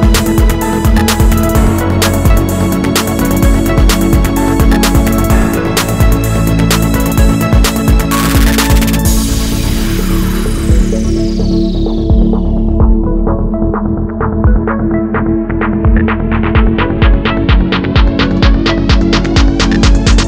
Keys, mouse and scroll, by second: 0.4 scroll down 2, 0.5-1.0 scroll up 2, 1.0 KP_0, 1.5 ctrl+s, 3.5 click, 3.8 click, 4.2 click, 4.5 click, 5.3-6.5 middle drag, 5.3 g, 6.1 shift+Tab, 6.3 scroll up 2, 6.5 g, 7.0-7.8 scroll down 1, 7.8 KP_1, 10.5 ., 12.3 Return, 14.0 KP_Enter, 14.3-16.1 middle drag, 15.1-15.6 scroll down 1, 16.1 click, 16.5 middle click, 16.8 drag, 17.0-20.2 middle drag, 18.5 scroll down 2, 19.6 KP_0.